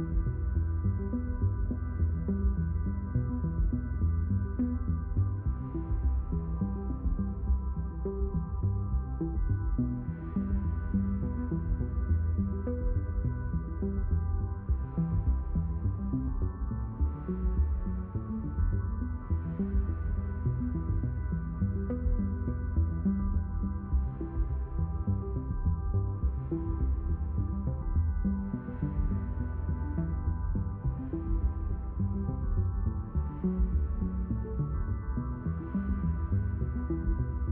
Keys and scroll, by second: 11.3 q, 11.7 space, 14.7 shift+q, 16.5 5, 16.7 0, 35.1 space.